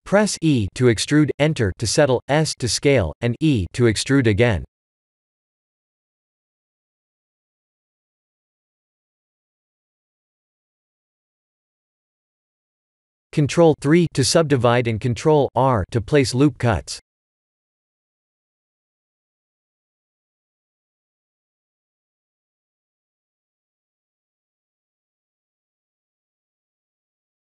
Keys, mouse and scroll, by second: 2.2 e, 2.8 s, 5.6 KP_1, 6.3 e, 13.2 Tab, 14.8 ctrl+3, 15.4 Tab, 16.0 scroll up 4, 16.6 shift+middle click, 17.4 ctrl+r, 20.7 ctrl+r, 22.6 ctrl+r, 25.6 ctrl+r, 26.0 ctrl+r.